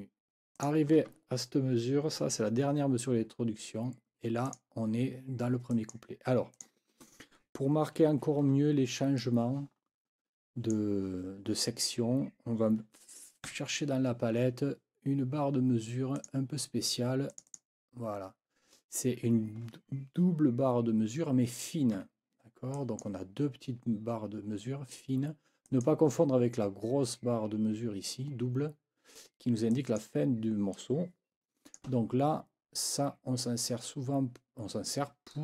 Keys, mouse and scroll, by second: 0.5 click, 4.5 click, 5.7 click, 6.5 click, 9.2 click, 9.9-10.9 drag, 13.5 F9, 16.1 click, 17.3 click, 22.0 Escape, 22.7 click, 25.7 click, 29.7 click, 30.7-31.9 drag, 35.3 click.